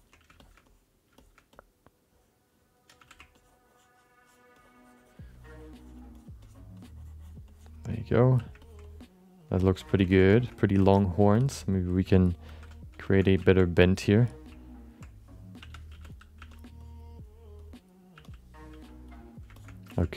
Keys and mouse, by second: 0.4 alt+shift+middle click, 0.6 alt+middle click, 1.2 alt+shift+middle click, 1.5 alt+middle click, 2.5 alt+middle click, 3.0 f, 3.3-4.5 ctrl+drag, 4.6 ctrl+click, 5.3 ctrl+click, 5.7 ctrl+click, 6.1 ctrl+click, 6.4 ctrl+click, 6.8 ctrl+click, 7.5 ctrl+click, 8.0 ctrl+click, 8.6 ctrl+alt+middle click, 8.8 alt+middle click, 9.6 alt+shift+middle click, 10.1 ctrl+middle click, 10.3 alt+shift+middle click, 10.4 alt+middle click, 10.8 alt+shift+middle click, 10.9 alt+middle click, 11.3 alt+shift+middle click, 11.5 alt+middle click, 12.5 alt+m, 13.1 shift+middle click, 13.4 ctrl+alt+middle click, 15.6 3, 15.9 f, 16.3 f, 16.8 click, 17.6 click, 18.1 f, 18.7 f, 19.1 click, 19.5 shift+middle click, 19.9 ctrl+alt+middle click.